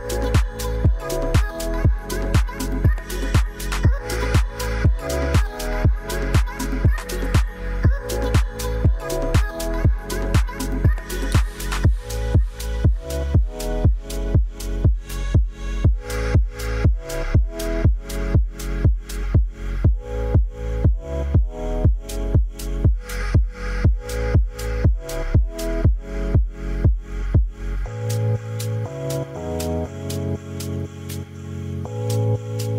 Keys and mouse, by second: 0.5 shift+middle click, 1.3 ctrl+s, 4.8 click, 5.4 click, 5.7 drag, 6.1-7.7 drag, 14.0 shift+middle click, 14.9 shift+drag, 18.4 click, 20.0 ctrl+s, 21.7 middle click, 23.5 shift+middle click, 25.8 ctrl+l, 31.1 shift+middle drag.